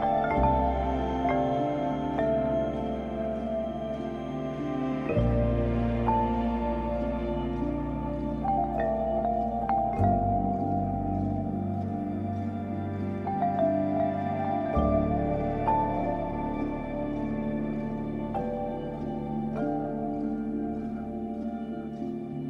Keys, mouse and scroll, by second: 10.7 click, 11.1 click, 11.2 space, 15.0 space, 15.2 ctrl+j, 18.0 ctrl+shift+a.